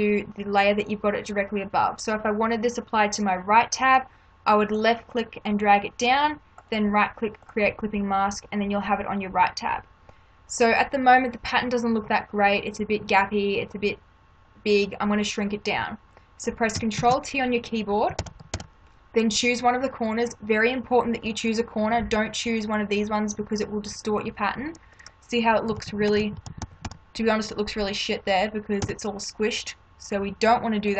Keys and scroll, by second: 17.0 ctrl+t, 18.2 ctrl+-, 25.7 ctrl+=, 28.8 Return.